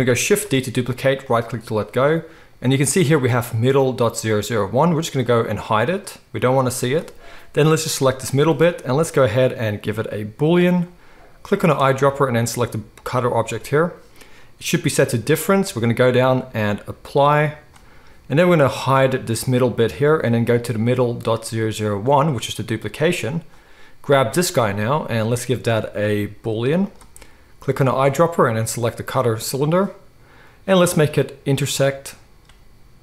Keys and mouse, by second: 0.4 shift+d, 5.6 click, 9.0-11.7 drag, 15.8-20.1 drag, 22.0 click, 24.0 click, 24.1-25.2 middle drag, 25.2-27.9 drag, 27.9-31.6 middle drag, 31.6 click, 31.7-33.0 middle drag.